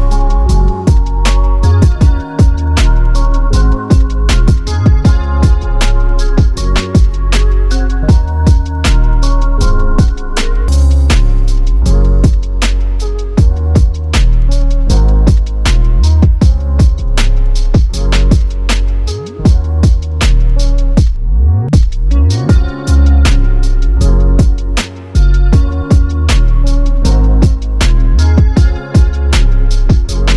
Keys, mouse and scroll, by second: 3.8 space, 8.1 space, 9.2 click, 9.4 click, 10.7 click, 13.4 right click, 14.7 click, 19.1 click, 19.7 right click, 20.3 right click, 21.7 click, 23.3 space, 27.4 space, 28.6 click.